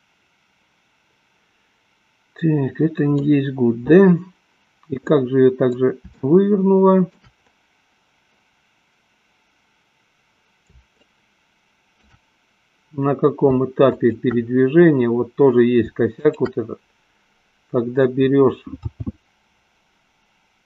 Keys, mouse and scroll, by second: 0.1-3.3 middle drag, 5.2-6.2 middle drag, 6.5-7.6 shift+middle drag, 11.0-12.3 shift+drag, 14.0 shift+click, 16.3 shift+click, 19.1 g.